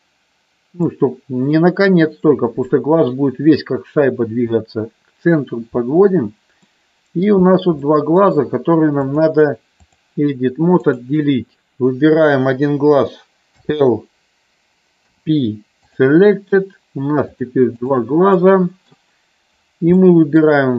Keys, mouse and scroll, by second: 6.7 middle click, 7.8 middle click, 9.0 click, 11.0 click, 13.6 l, 15.1 p, 17.4 click, 18.3 middle click, 20.0 middle click.